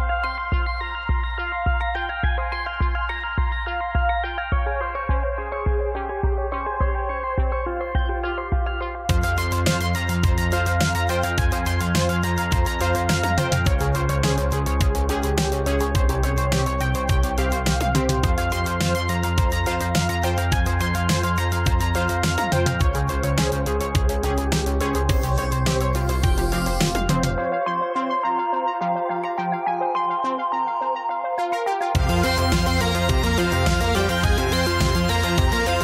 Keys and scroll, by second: 9.3 space, 33.0 space, 35.6 space.